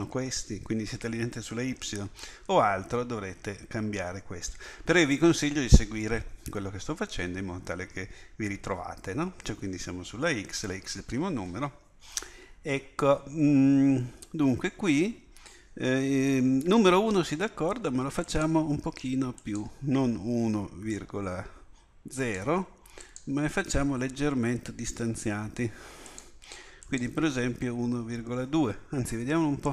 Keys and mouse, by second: 18.3-29.7 drag.